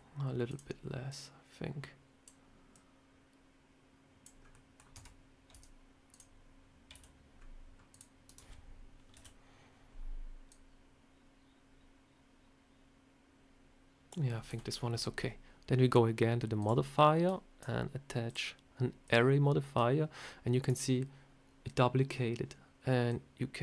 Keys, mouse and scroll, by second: 1.0 click, 2.6 click, 4.3 scroll up 2, 4.4 middle click, 4.8 Tab, 5.4 Tab, 6.0 click, 6.8 c, 9.0 KP_7, 10.4 click, 14.4 a, 16.5 click, 18.2 click, 22.0 scroll down 1, 23.0 click.